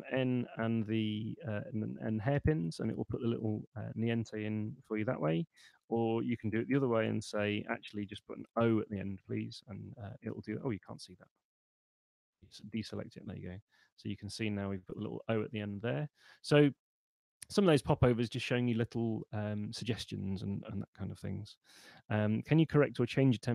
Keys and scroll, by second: 0.0 BackSpace, 2.2 Return, 4.8 super+z, 6.2-8.4 typing, 9.0 Return.